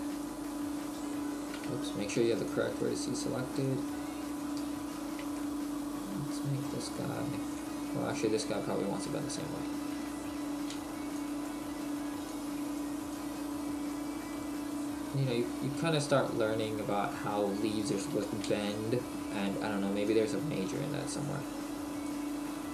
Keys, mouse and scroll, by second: 3.6 click, 4.7 ctrl+a, 5.1 ctrl+z, 6.7 middle click, 7.6 click, 9.0 ctrl+z, 9.3-9.6 scroll up 1, 10.7 b, 12.3 click, 14.3 middle click, 16.1 middle click, 16.9 right click, 18.5 a, 18.5 b, 20.1 click, 22.5 middle click.